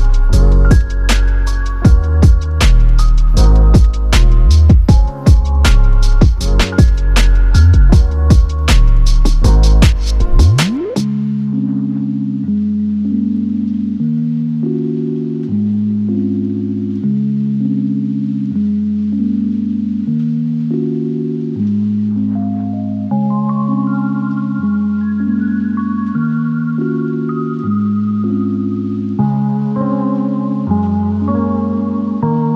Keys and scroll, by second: 4.5 space.